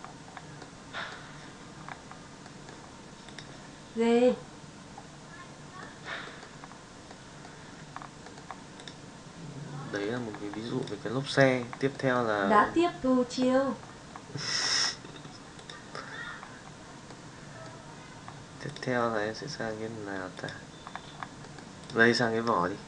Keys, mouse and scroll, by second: 0.6-1.1 middle drag, 5.8 middle click, 6.4 middle drag, 7.0-7.6 middle drag, 8.2 middle click, 8.8 click, 10.0 middle drag, 12.0 middle click, 17.0-17.6 middle drag, 20.4 click, 21.4 middle drag, 21.8 click.